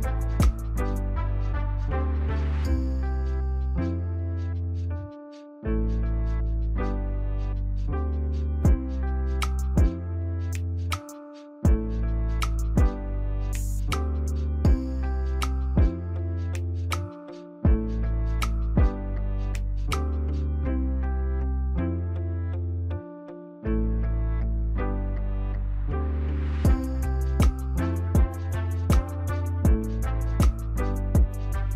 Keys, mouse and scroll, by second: 0.8 right click, 25.7 right click.